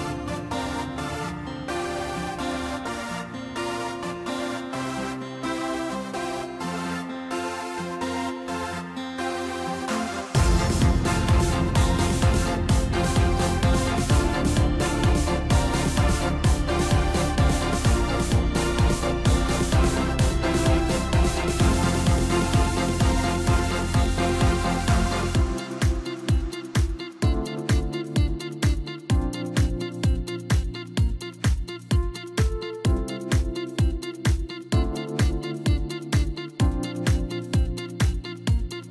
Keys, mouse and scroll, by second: 0.4 s, 2.5 Tab, 4.0 drag, 4.3 scroll down 2, 4.5-6.0 middle drag, 6.0-6.8 scroll up 4, 7.2-8.2 scroll down 7, 8.2-8.9 scroll down 2, 8.9-9.5 middle drag, 9.5-9.9 scroll up 1, 9.9-12.9 middle drag, 13.1 drag, 13.4-14.0 middle drag, 14.0-14.9 scroll up 6, 14.9 click, 15.4-17.6 middle drag, 17.6-18.1 scroll up 1, 18.1 Tab, 18.6 middle click, 19.5 click, 19.9 scroll down 2, 20.1-21.7 middle drag, 21.7 shift+click, 22.7 KP_3, 23.8-24.5 scroll up 2, 24.5 scroll down 1, 25.4 ctrl+KP_4, 25.6 ctrl+KP_4, 26.0 ctrl+KP_4, 27.8-29.4 drag, 30.8 click, 34.8-36.4 drag, 36.4 0.